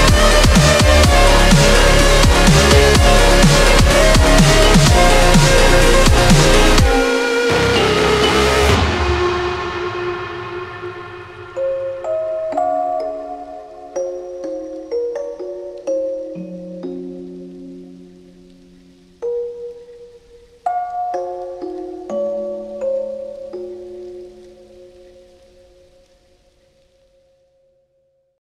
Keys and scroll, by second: 0.4-2.5 scroll down 1, 3.4 ctrl+z, 3.4 scroll down 1, 4.0-5.1 scroll down 1, 6.9 ctrl+z, 7.4 ctrl+z, 8.4 ctrl+z, 8.8-9.6 scroll down 1, 10.7 ctrl+z, 11.1 ctrl+z, 11.9 scroll down 1, 12.8 ctrl+z, 14.3-14.9 scroll up 1.